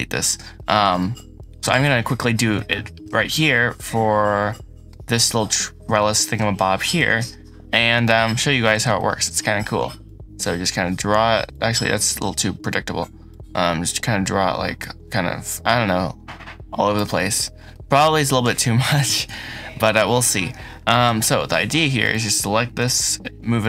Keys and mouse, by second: 0.4 middle click, 0.9 shift+click, 2.5 shift+click, 3.4-4.8 middle drag, 5.9 shift+middle click, 6.8 KP_7, 7.9 shift+middle click, 8.8 shift+middle click, 9.9-11.4 drag, 12.1 ctrl+z, 13.1-16.9 drag, 22.0 shift+middle click, 22.9 g, 22.9 z, 23.5-23.6 drag.